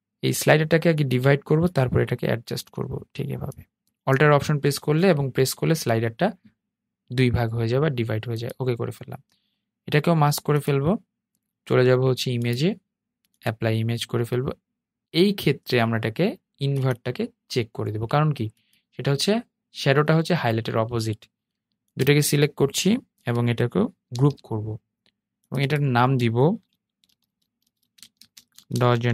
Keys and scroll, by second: 23.2 super+g.